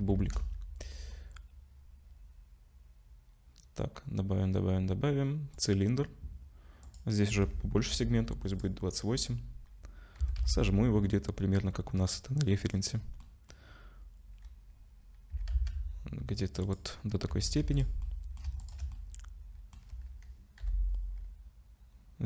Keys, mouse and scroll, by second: 0.2 shift+a, 6.8 click, 8.8-9.2 scroll down 5, 10.2 s, 13.8-15.3 scroll up 1, 15.3 s, 17.3 Tab, 17.6 3, 17.8 click, 18.0 middle click, 18.6 shift+click, 18.9 middle click, 20.6 i.